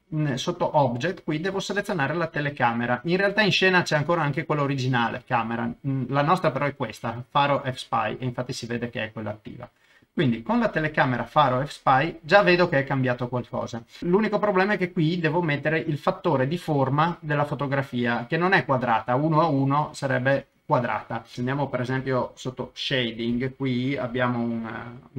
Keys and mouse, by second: 1.5-10.1 drag.